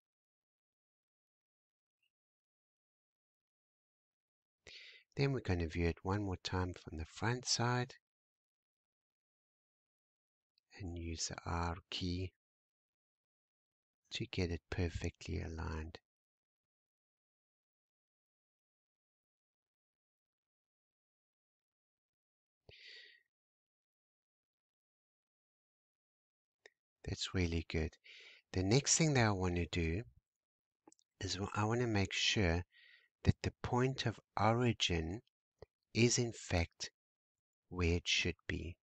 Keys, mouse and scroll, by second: 3.9 `, 7.0-7.3 scroll down 2, 7.3-7.8 scroll up 1, 9.8 r, 14.4 g, 18.8-19.8 scroll down 4, 19.8-20.7 scroll down 1, 20.7-22.1 shift+middle drag, 22.1-22.8 scroll down 3, 22.8 shift+middle click, 23.3 scroll down 1, 23.8-25.4 scroll up 1, 29.0 g, 37.7-38.2 scroll down 3, 38.4 shift+middle click.